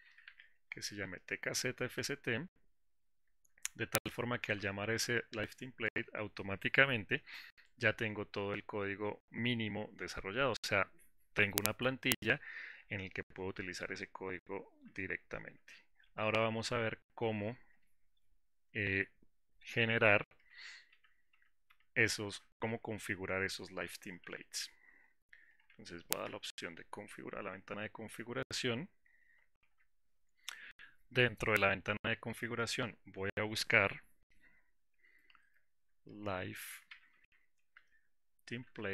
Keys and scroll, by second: 4.7 Return, 15.4 ctrl+alt+w, 18.9 ctrl+shift+w, 20.6 ctrl+alt+w, 24.4 Delete, 26.3 Delete, 26.5 ctrl+alt+s.